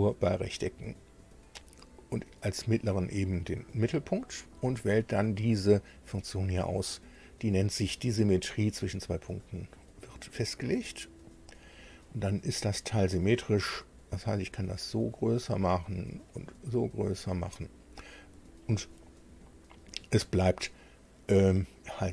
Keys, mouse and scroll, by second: 0.9 click, 3.7 click, 11.3 click, 14.0-15.5 drag, 16.3-18.4 drag.